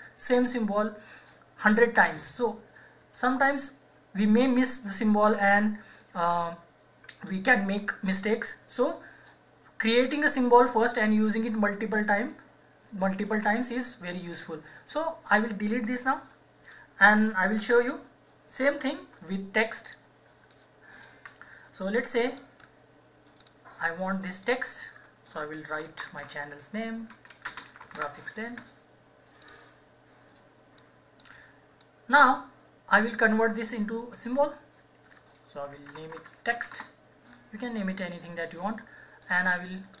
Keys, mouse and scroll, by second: 15.6 click, 16.9 Delete, 19.0 shift+F4, 19.9 click, 21.1 Delete, 22.3 click, 25.6-28.4 typing, 29.4 click, 31.8-34.4 drag, 35.8-37.0 typing, 39.2 click, 39.6-40.0 right drag.